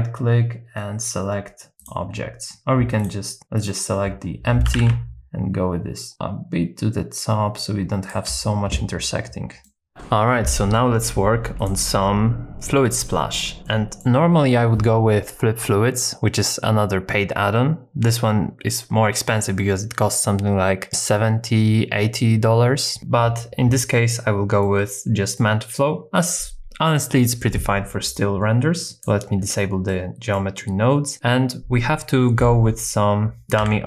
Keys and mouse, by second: 3.0 click, 4.7 g, 4.8 z, 8.1 shift+click, 9.6 middle click, 11.6 click, 13.1 shift+middle click, 13.6 middle click, 24.6 middle click, 29.0 click, 29.9 middle click, 32.4 middle click, 33.6 shift+d.